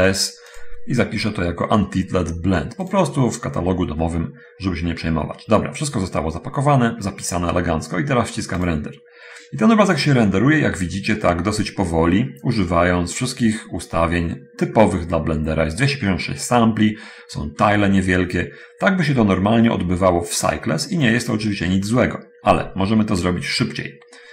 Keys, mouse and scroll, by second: 0.9 click, 2.8 click, 22.6 Escape, 23.4 Escape, 23.5 Escape, 23.9 middle click.